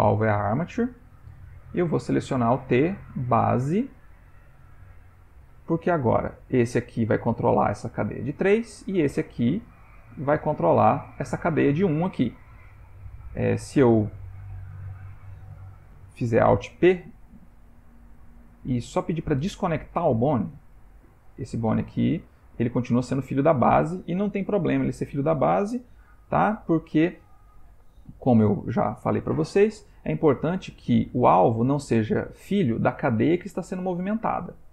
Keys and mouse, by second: 2.0 click, 4.8 ctrl+middle click, 6.5 click, 9.0 click, 9.5 g, 12.9 Tab, 14.3 Tab, 14.8 Tab, 16.3 alt+p, 21.4 click, 21.7 g, 26.1 ctrl+z, 28.5 Tab, 31.1 click.